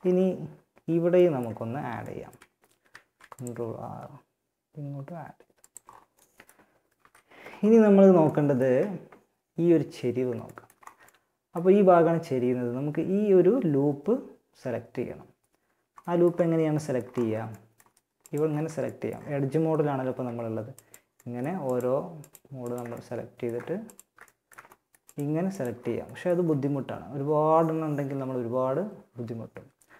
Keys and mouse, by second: 2.1 ctrl+r, 6.2 KP_1, 10.4-15.5 middle drag, 22.2-23.5 drag, 23.6-25.0 middle drag, 25.0 click, 25.4-29.3 middle drag, 29.3 a.